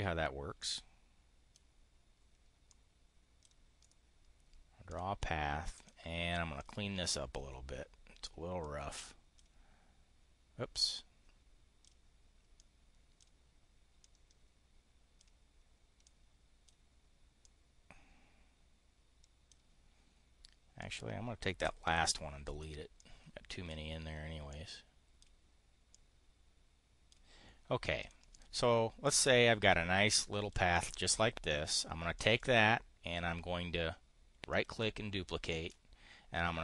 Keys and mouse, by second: 0.4-1.5 drag, 2.5 click, 3.7 click, 4.8 click, 5.6 click, 6.5 click, 8.5-9.4 drag, 10.8-11.8 drag, 12.5 click, 13.9-15.2 drag, 15.9 click, 17.3-19.5 drag, 20.7 click, 21.8 Delete, 23.0 click, 24.4 click, 25.8-27.1 drag, 27.9 click, 28.1 click, 28.9-30.5 drag, 30.6 click, 32.2 click, 34.5 click, 35.6-36.6 ctrl+drag.